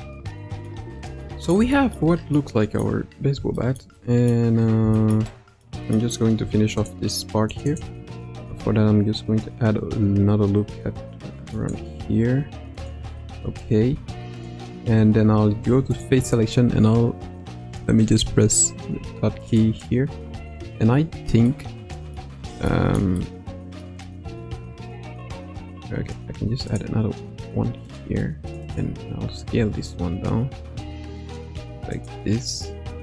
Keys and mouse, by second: 0.3 middle click, 1.2 middle click, 1.7 shift+middle click, 2.3 middle click, 3.5 shift+middle click, 4.1 middle click, 4.9 shift+middle click, 5.3 middle click, 5.9 middle click, 6.3 Tab, 7.7 click, 8.4 ctrl+r, 13.1 Tab, 13.8 Tab, 14.3 click, 15.6 3, 15.9 click, 18.1 KP_Decimal, 19.5 click, 21.5 middle click, 22.7 shift+middle click, 23.2 middle click, 26.1 ctrl+r, 28.7 click, 29.5 s, 32.8 middle click.